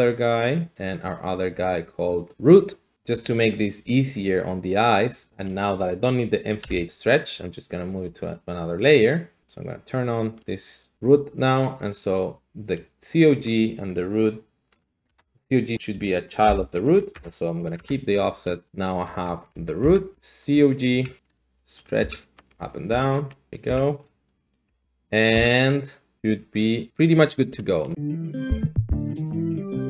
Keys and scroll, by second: 6.6 m, 6.6 n, 15.1 Tab, 16.4 ctrl+p, 17.1 Return, 17.8 Tab, 18.7 g, 19.1 Escape, 19.8 Escape, 20.1 g, 20.9 Escape, 21.4 g, 22.0 Escape, 22.5 g, 22.9 Escape, 23.5 g, 23.7 Escape, 24.7 g, 25.3 Escape.